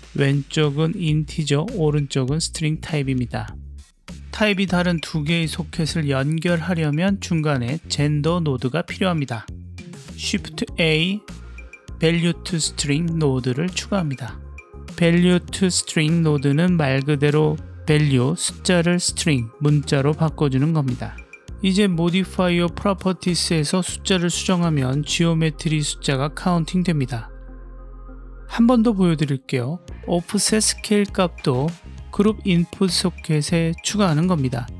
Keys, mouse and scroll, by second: 4.8 click, 7.4 ctrl+right click, 8.3 click, 10.1 shift+a, 16.2 click, 16.6-18.1 drag, 19.2 click, 21.7-24.6 drag, 25.3-26.6 middle drag, 27.0 click, 27.4-28.4 scroll up 2, 28.8-30.2 drag, 30.4-31.8 middle drag.